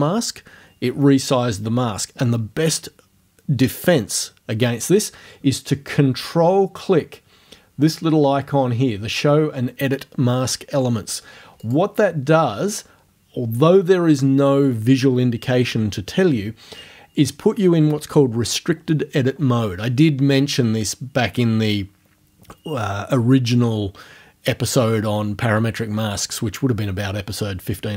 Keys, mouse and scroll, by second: 11.6 ctrl+click.